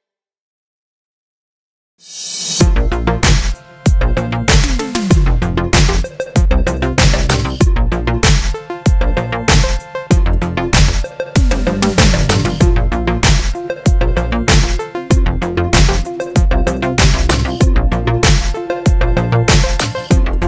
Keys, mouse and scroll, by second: 0.5 scroll, 1.6-3.6 middle drag, 3.6 a, 4.3 3, 5.5 alt+e, 6.7-8.1 middle drag, 7.1 ctrl+z, 7.7 s, 8.1 click, 8.2 KP_1, 8.6-13.3 middle drag, 8.6 z, 12.7 z, 13.0 1, 13.3 click, 13.8 x, 13.9-15.6 middle drag, 14.8 KP_7, 15.6-17.9 drag, 17.9-19.8 middle drag, 18.2 KP_1, 18.8 2, 19.8 r.